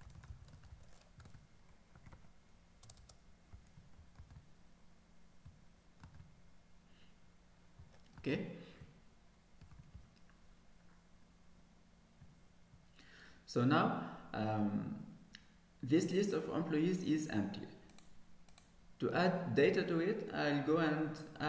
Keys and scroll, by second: 1.4 Tab, 4.4 ctrl+s, 6.2 ctrl+s, 8.4 ctrl+s.